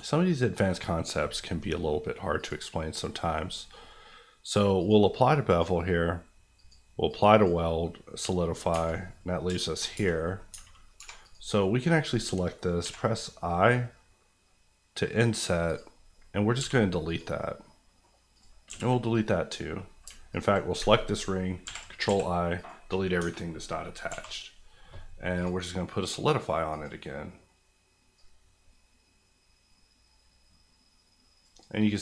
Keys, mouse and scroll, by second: 2.3 click, 7.4 click, 8.7 Tab, 9.2-9.5 scroll up 2, 9.7 shift+middle click, 9.9 middle click, 10.5 Tab, 11.0 3, 11.2 click, 11.6 middle click, 15.6 click, 16.5 x, 17.0 click, 17.6 middle click, 18.3 click, 18.6 x, 19.2 click, 20.0 alt+click, 20.6 click, 20.8 ctrl+click, 22.1 x, 22.5 click, 23.2 Tab, 24.0 q, 25.3 click, 28.4 click, 31.6 click.